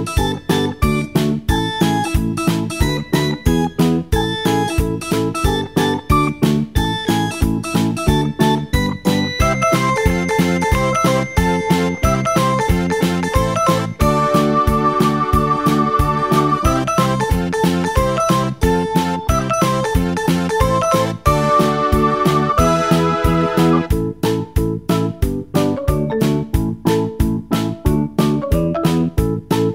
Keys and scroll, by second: 5.6 Escape, 9.2 Delete.